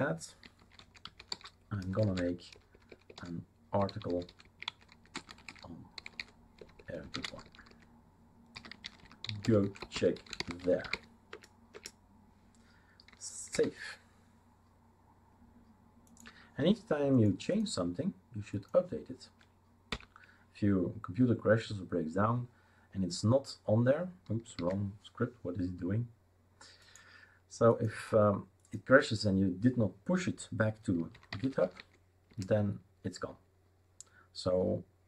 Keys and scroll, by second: 0.4-11.4 typing, 11.7 Return, 13.5 ctrl+s, 20.1 Up, 24.6 ctrl+c, 31.1-32.1 typing, 32.3 Return, 34.9-35.0 typing.